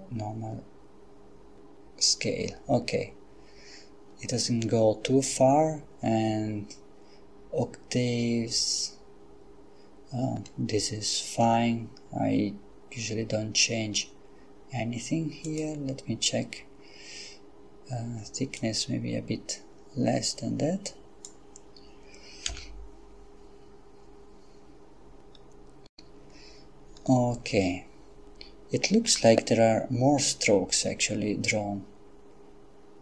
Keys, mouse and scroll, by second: 15.5 click, 18.7-21.8 drag, 22.5 F12, 29.0 Escape.